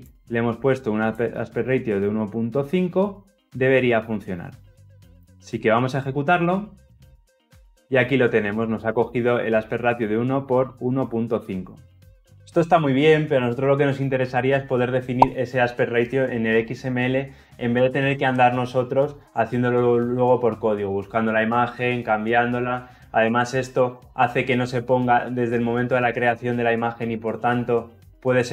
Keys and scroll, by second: 6.6 shift+F10.